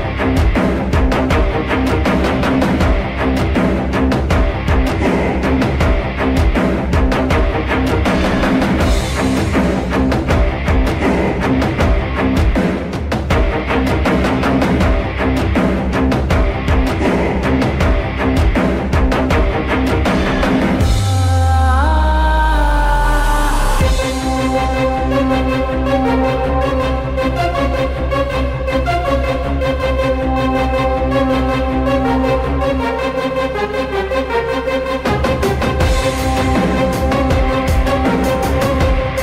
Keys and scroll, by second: 3.3 w, 8.8 typing, 10.4 w, 11.2 l, 14.2 c, 15.8 F3, 18.3 w, 33.2 t, 35.8 f, 36.6 w, 38.5 l.